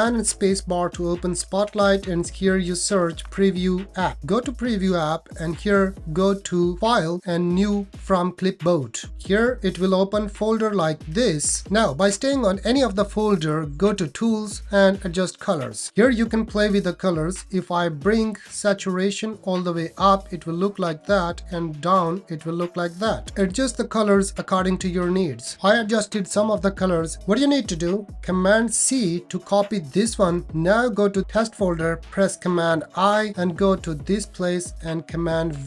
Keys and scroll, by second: 0.0 super+space, 0.0 super+space, 28.7 super+c, 32.7 super+i, 35.4 super+v.